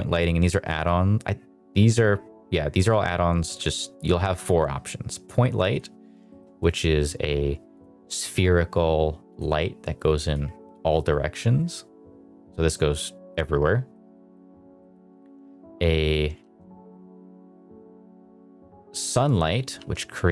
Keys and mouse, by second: 6.2 shift+middle click, 7.3 g, 7.7 click, 9.2 click, 10.3-11.3 drag, 12.6-13.8 middle drag, 14.0 middle drag, 14.7 middle click, 16.3 shift+a, 19.7 r.